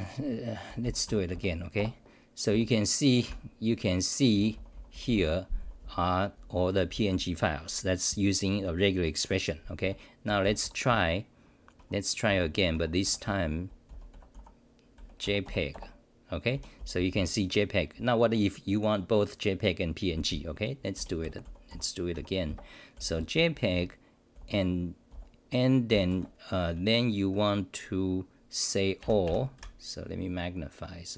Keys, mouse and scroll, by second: 1.0 BackSpace, 1.8 Return, 2.5 w.